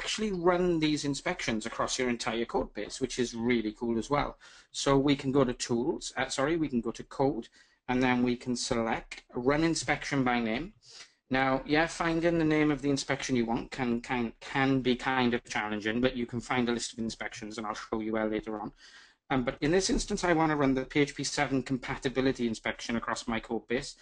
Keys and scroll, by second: 10.7 ctrl+alt+shift+super+i.